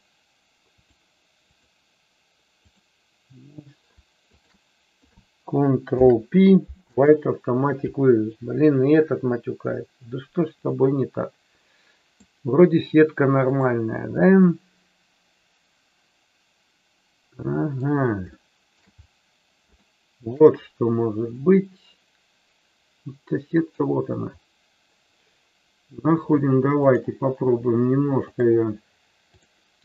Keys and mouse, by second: 0.8-2.8 drag, 5.8 ctrl+p, 10.8-12.3 middle drag, 14.1-17.8 middle drag, 18.4-18.8 shift+middle drag, 19.8-20.3 shift+middle drag, 21.4-23.7 middle drag, 28.3-29.5 drag.